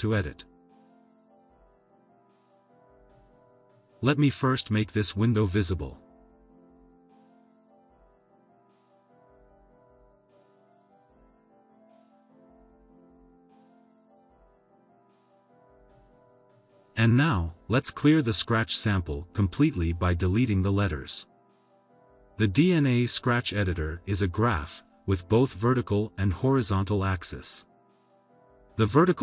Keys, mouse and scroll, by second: 6.6 drag, 6.8-7.3 drag, 7.4 click, 7.6 click, 10.1 click, 10.9 click, 12.1-13.2 drag, 13.8 click, 19.2 click, 20.5 BackSpace.